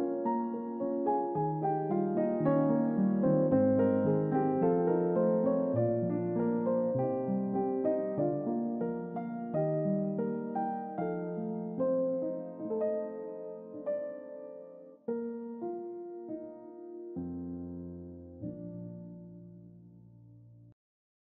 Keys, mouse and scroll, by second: 0.4-1.5 scroll up 2, 1.5-3.5 drag, 5.2 click, 6.7 click, 8.2 click, 9.2 0, 11.0 click, 12.5 click, 13.7 click, 14.3 double click, 15.1 click, 16.3 typing, 17.1 Return, 18.9-21.2 drag.